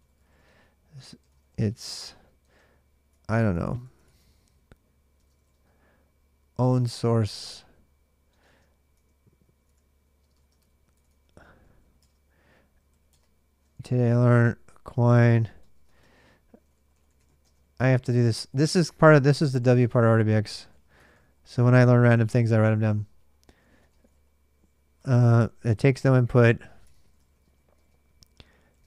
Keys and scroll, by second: 0.0-1.6 typing, 10.0-11.6 typing, 11.8 Return, 12.7-28.8 typing, 12.9 Return.